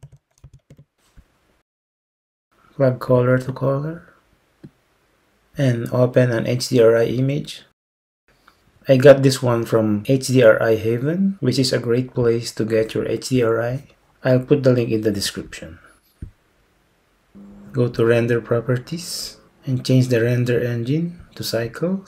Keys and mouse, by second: 3.6-5.2 drag, 8.0 click, 19.3 click, 21.4-22.0 drag.